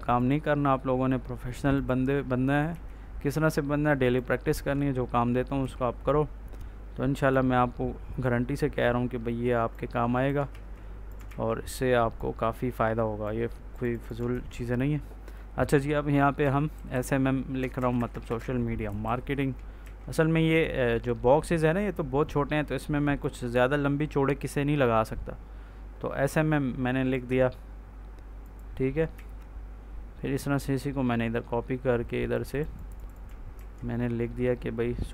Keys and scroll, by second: 2.6 ctrl+c, 5.5 ctrl+v, 10.4 ctrl+z, 14.2 ctrl+a, 16.3 s, 16.6 m, 17.5 Caps_Lock, 17.6 BackSpace, 18.3 s, 18.8 m, 19.7 ctrl+s, 29.0 ctrl+s, 33.4 ctrl+s.